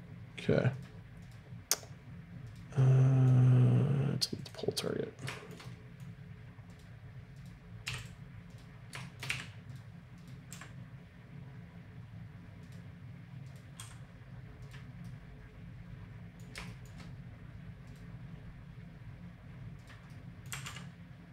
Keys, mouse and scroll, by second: 0.7-3.4 right drag, 2.7 click, 4.8 click, 6.7-7.7 right drag, 7.8 x, 9.2 g, 10.5 g, 13.4-15.2 right drag, 13.7 r, 15.0 middle click, 17.9-21.1 right drag, 20.5 r.